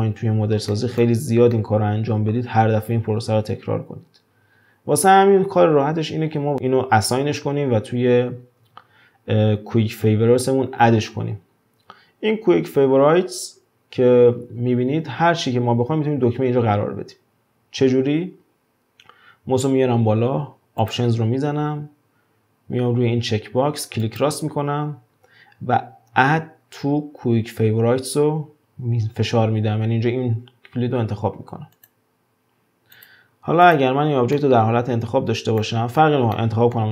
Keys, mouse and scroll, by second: 0.2-0.7 scroll up 1, 0.7 shift+middle click, 1.0-1.5 scroll up 1, 1.5-4.6 middle drag, 8.6 q, 20.8-23.8 drag, 33.0 click, 33.6 click, 34.3-35.8 middle drag, 35.8-36.3 scroll down 2, 36.3-36.9 middle drag.